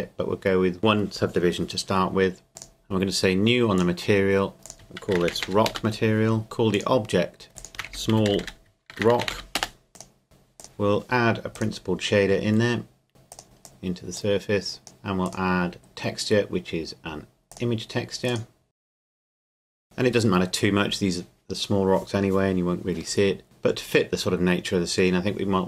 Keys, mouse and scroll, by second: 2.6 click, 5.0-5.4 typing, 5.7 Return, 6.7 click, 7.5 scroll up 2, 7.6 click, 7.7-9.3 typing, 9.6 Return, 9.9 click, 10.6 Delete, 11.5 click, 13.3 click, 17.5 click, 19.0 click, 19.5 click.